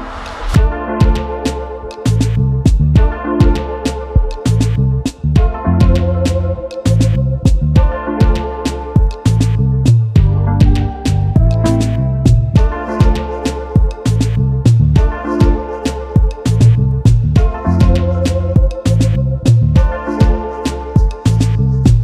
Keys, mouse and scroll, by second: 0.0 scroll down 2, 0.3 click, 2.9 middle click, 2.9 scroll up 1, 3.1 click, 3.1-4.2 typing, 3.2 shift+middle click, 3.2-3.6 scroll down 2, 3.7 click, 4.0 click, 4.2 scroll down 1, 4.2 shift+middle click, 4.3 scroll up 1, 5.4-7.1 drag, 7.3-10.0 typing, 8.1 click, 8.4 middle click, 8.5-8.9 scroll down 3, 8.7 click, 9.0 click, 9.2 click, 9.4 click, 9.9 right click, 10.1 click, 10.3 scroll down 2, 10.9 click, 12.6-14.9 typing, 12.7 click, 13.1 right click, 13.8 click, 14.5 click, 14.7 click, 14.9-15.5 scroll up 2, 15.0 shift+middle click, 16.3 right click, 16.3 scroll down 2, 16.4 scroll up 1, 17.7 click, 18.6 middle click, 18.7 scroll up 5, 18.9 shift+middle click, 19.2 shift+b, 19.4 scroll down 3, 19.4 shift+middle click, 19.6 click, 20.1 s, 20.4 click, 20.4 g, 20.4 shift+z, 20.7 click, 20.8 middle click, 20.9 scroll up 1, 21.0 middle click, 21.4 click.